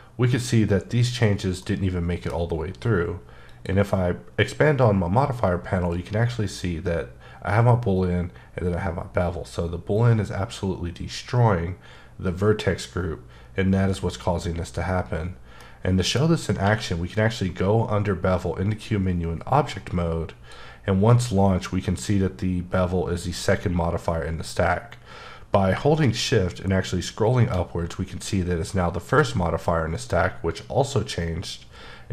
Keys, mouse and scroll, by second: 2.0 middle click, 3.5 click, 15.6 middle click, 16.6 q, 18.8 click, 25.7 click, 26.8-27.6 shift+scroll up 1, 27.6-29.6 scroll up 1.